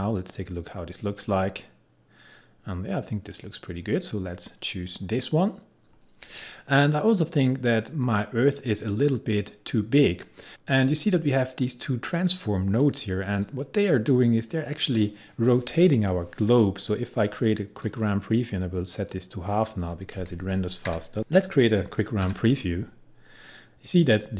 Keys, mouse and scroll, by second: 11.6-13.4 drag, 17.8-24.3 drag.